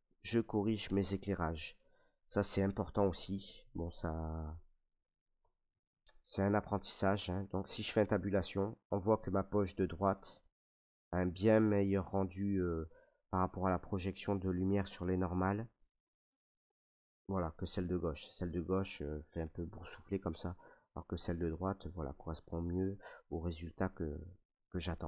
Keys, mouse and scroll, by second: 1.2 shift+middle click, 1.3 shift+middle click, 2.5 k, 3.7 click, 4.4 click, 5.4 Return, 5.6 middle click, 5.7 middle click, 5.8 shift+middle click, 6.6 middle click, 6.7 middle click, 7.2 Tab, 9.2 middle click, 10.7 middle click, 15.1 middle click, 16.1 middle click, 19.6 middle click, 20.6 middle click, 21.8 middle click, 22.4 middle click, 23.6 middle click, 23.9 middle click.